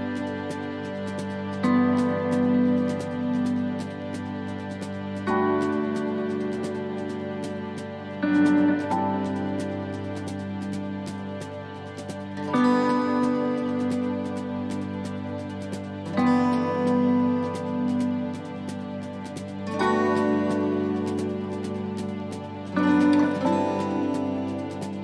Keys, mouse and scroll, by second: 7.3 alt+s, 8.6 middle click, 10.1 click, 14.6 middle click, 16.1-16.5 scroll up 2, 16.5 middle click, 17.1 middle click, 18.3 click, 20.0 click, 20.9 middle click, 22.1 scroll up 2, 22.4 middle click, 23.4 click.